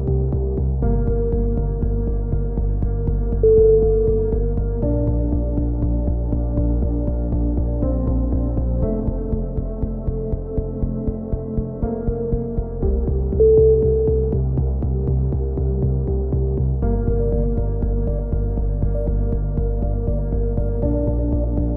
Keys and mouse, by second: 0.0-1.0 right drag, 0.6 KP_3, 1.0 e, 1.2 z, 1.5 click, 2.4 click, 4.3 click, 5.0 click, 5.8 right click, 6.1 KP_3, 6.6 g, 7.7 a, 8.4 click, 8.9 right click, 9.3 KP_3, 9.8 click, 11.7 KP_7, 12.5 click, 13.9 click, 14.5 a, 15.2 z, 15.7-17.0 drag, 17.0 right click, 17.2 click, 18.0 a, 18.3 click, 19.1 KP_3, 19.3 z, 20.5 right click, 20.9 click, 21.3 z, 21.4 a.